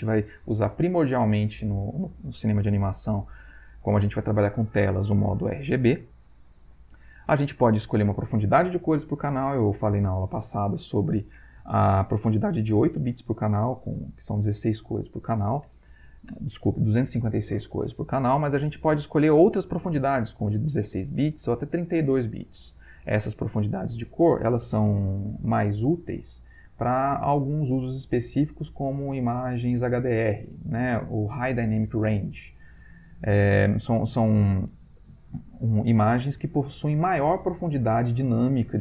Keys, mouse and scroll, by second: 18.8 click.